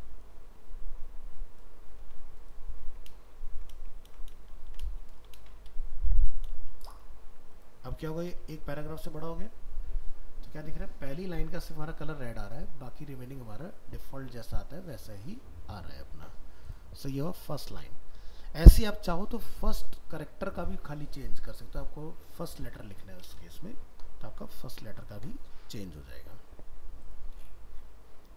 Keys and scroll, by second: 2.1 ctrl+c, 3.9 ctrl+space, 4.1 ctrl+v, 6.8 ctrl+s, 8.0 ctrl+s, 8.5 alt+Tab, 17.7 ctrl+w.